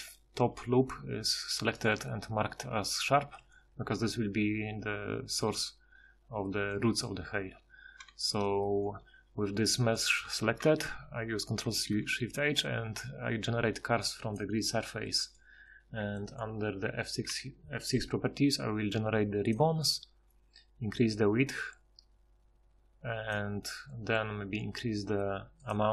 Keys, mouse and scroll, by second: 1.1 2, 3.1 a, 4.8 z, 5.4 KP_Divide, 7.6 Tab, 8.9 Tab, 11.6 ctrl+shift+h, 14.4 ctrl+shift+h, 17.3 F6, 19.5 F6.